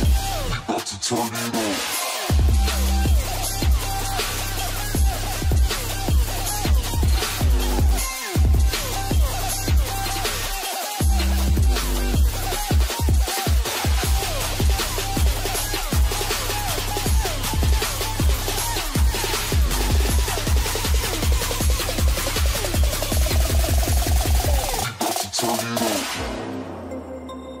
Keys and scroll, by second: 0.2 ctrl+space, 4.0 ctrl+space, 15.6 Return.